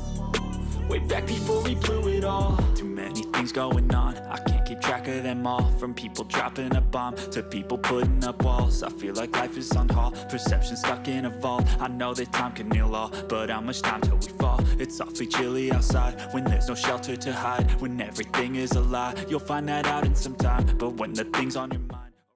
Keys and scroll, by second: 3.3 ctrl+=, 6.8 ctrl+0, 9.3 ctrl+=, 12.7 ctrl+g, 15.5 ctrl+0.